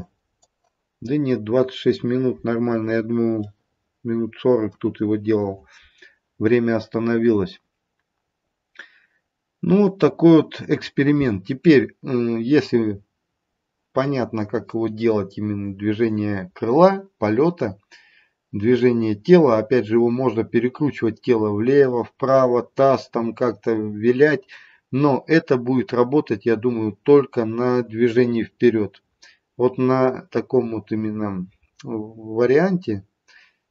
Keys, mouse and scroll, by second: 3.4 middle click, 8.1-11.1 scroll down 1.